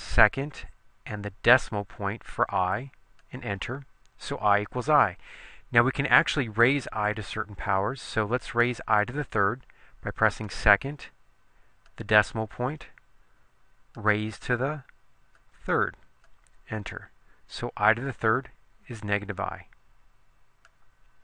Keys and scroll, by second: 1.6 ., 3.4 Return, 12.0 ., 14.2 ^, 15.6 3, 16.4 Return.